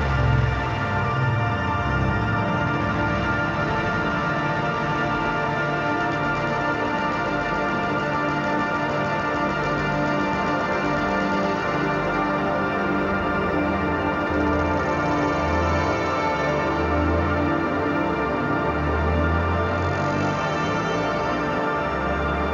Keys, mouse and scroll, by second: 0.3 click, 3.0-6.0 drag, 6.0 ctrl+=, 6.6 space, 6.8 click, 6.9 space, 7.1 click, 8.4-10.0 drag, 10.0 ctrl+y, 10.5 space, 10.6 click, 10.8 space, 11.4 ctrl+-, 12.4 click, 13.7 space, 13.8 click, 13.9 space, 15.1 space, 15.9 click, 16.8 ctrl+z, 17.3-19.5 drag, 20.0-21.5 shift+drag.